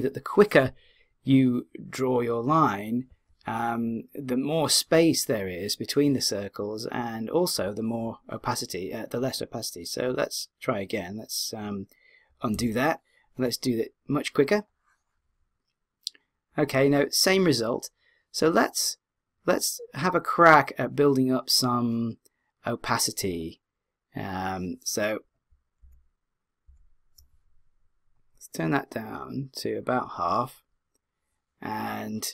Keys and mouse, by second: 12.5 z, 19.9 click, 25.8 super+z, 26.7 super+z, 28.2-31.0 drag.